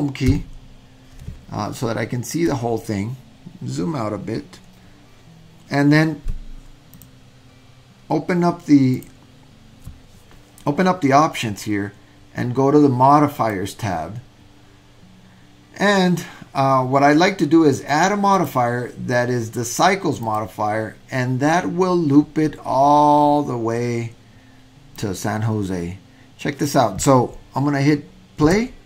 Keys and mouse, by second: 0.3 Home, 6.9 click, 8.9 click, 13.4 click, 18.3-20.4 drag, 25.1-26.7 drag, 28.5 space.